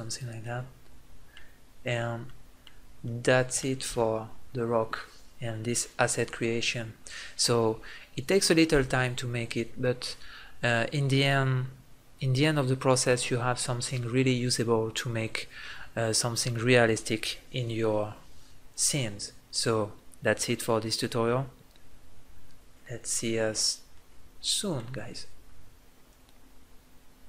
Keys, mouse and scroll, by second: 0.1 click, 23.7 middle click.